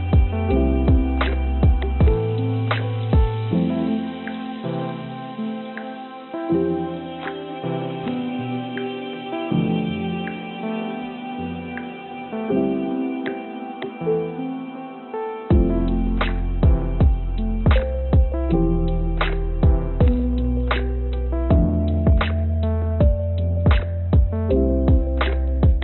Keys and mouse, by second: 5.6 click, 6.1-7.5 right drag, 10.8 click, 12.1 Tab, 14.0 click, 14.9 click, 15.6 click, 19.1 n, 19.3 u, 19.7 b, 22.4 click, 23.2-25.8 drag.